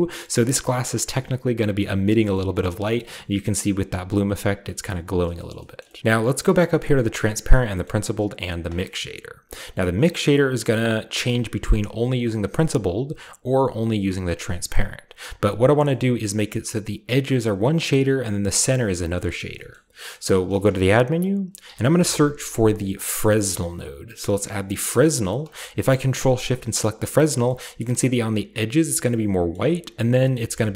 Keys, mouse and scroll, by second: 1.1-2.3 scroll up 1, 2.3-2.9 scroll up 1, 2.5-2.9 middle drag, 3.1-4.6 middle drag, 5.2 shift+middle drag, 5.5 middle click, 5.8 shift+middle click, 6.0 ctrl+alt+Left, 6.0 middle click, 6.3-8.3 shift+scroll up 1, 6.5 shift+middle click, 6.8-7.1 middle drag, 7.4 middle click, 8.4 middle click, 9.6-12.4 middle drag, 15.7 shift+middle click, 15.8-17.9 shift+scroll up 1, 15.8-17.9 shift+middle drag, 18.8 middle click, 18.8-20.5 scroll down 3, 19.1 middle click, 19.7 middle click, 20.1-21.2 middle drag, 20.6 shift+a, 21.2 click, 21.6-22.0 typing, 23.7 click, 24.8 click, 26.1 ctrl+shift+click, 27.1-27.9 scroll down 4, 27.3-28.9 shift+middle drag, 27.9-29.5 scroll up 2.